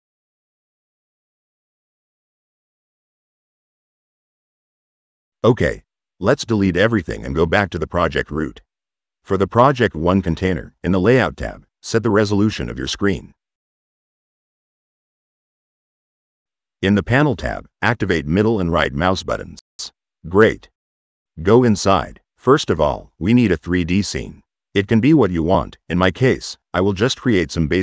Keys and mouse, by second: 2.3-3.4 drag, 4.3 click, 5.3-6.5 right drag, 10.3 middle click, 10.5 click, 12.0 click, 13.3 click, 14.8 click, 16.0 click, 18.0 click, 23.5-24.2 drag, 26.6 click, 27.7 click.